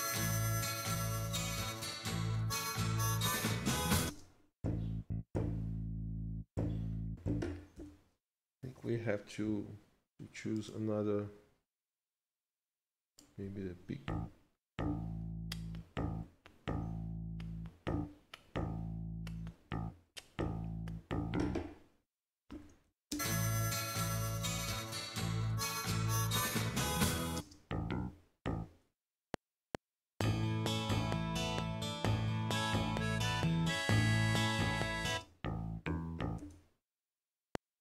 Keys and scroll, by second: 4.1 space, 7.8 i, 22.5 ctrl+shift+Left, 23.2 space, 27.4 space, 29.1 F8, 35.1 space, 36.4 z, 37.3 F7.